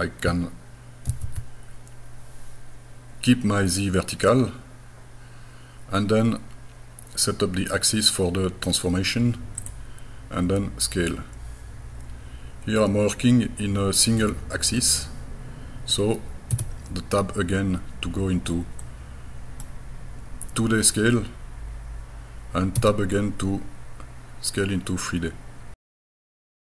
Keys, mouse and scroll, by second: 1.1 shift+z, 9.6 click, 16.5 Tab, 18.8 middle click, 22.8 Tab.